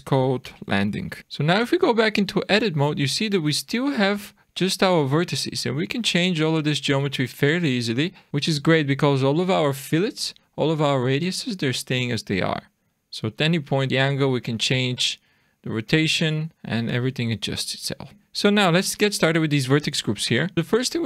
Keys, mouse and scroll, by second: 1.2 click, 1.6 Tab, 2.2-2.8 scroll up 1, 2.8 scroll down 1, 4.0 click, 8.3-10.1 scroll down 2, 12.3-13.2 scroll down 1, 13.2 click, 13.9 click, 16.5 click, 18.1-19.2 scroll up 1, 19.4 scroll down 1, 19.9 middle click, 20.4 scroll down 1, 20.5 middle click, 20.5 scroll up 4.